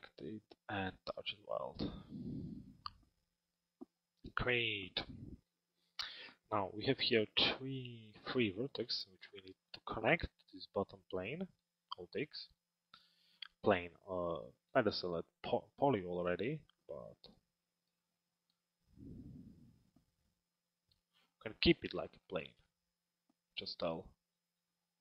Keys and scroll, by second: 11.4 alt+x.